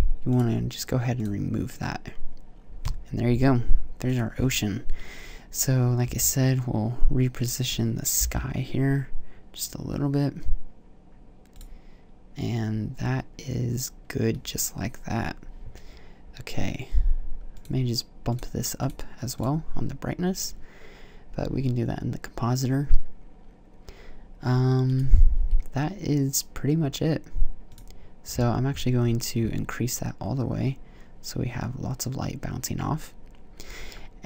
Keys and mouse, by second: 4.1-5.5 drag, 6.0 s, 7.4-8.7 drag, 8.1 g, 11.5 click, 17.5-22.8 drag, 25.0-27.6 drag, 28.1 click, 28.8 click.